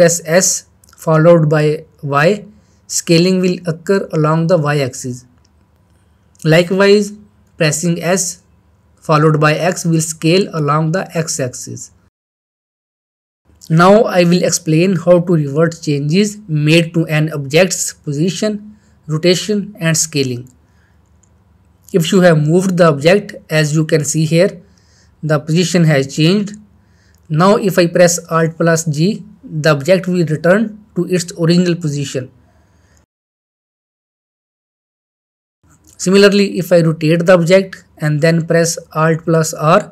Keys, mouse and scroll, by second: 0.0-0.6 middle click, 1.7 ctrl+z, 2.1 middle click, 2.4 shift+middle click, 4.3 s, 5.8 y, 8.5 Escape, 9.5 s, 10.5 x, 13.6 Escape, 14.1-14.5 middle click, 14.9-16.2 shift+middle drag, 17.7-18.1 shift+middle click, 18.2 shift+middle drag, 20.6 g, 22.2 click, 22.7-23.7 middle click, 28.9 middle click, 29.0-30.1 middle drag, 31.8 alt+g, 33.8 middle click, 34.3 shift+middle click, 35.7 shift+middle click, 36.7 click, 38.4 alt+r.